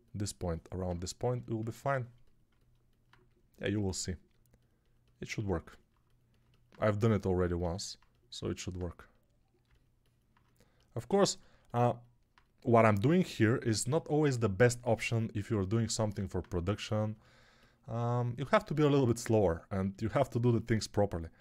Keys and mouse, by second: 11.5-17.0 ctrl+alt+right drag, 17.0-21.4 alt+drag.